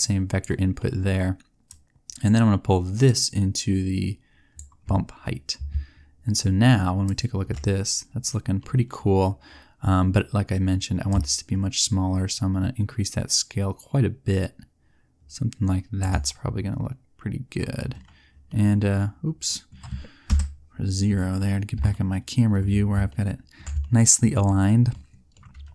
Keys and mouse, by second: 8.3 click, 12.0 middle click, 13.0 middle click, 13.9 middle click, 14.8 middle click, 18.4-19.5 middle drag, 20.2 KP_0.